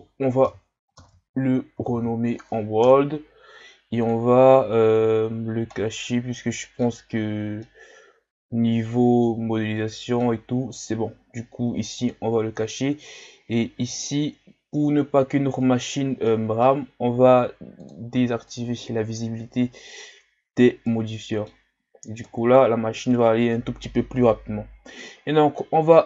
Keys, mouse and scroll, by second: 4.0 click, 5.3 shift+scroll up 1, 5.7-10.6 middle drag, 12.0 click, 13.9-16.2 drag, 16.2-17.9 middle drag, 17.9-18.6 drag, 20.8-22.2 middle drag, 22.2 KP_1.